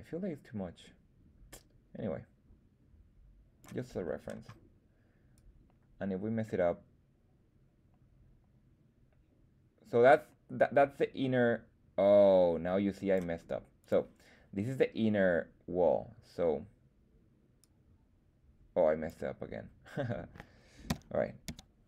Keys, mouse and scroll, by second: 5.3-13.1 drag, 13.7 click, 17.5-19.0 drag, 20.8 x, 21.4 x.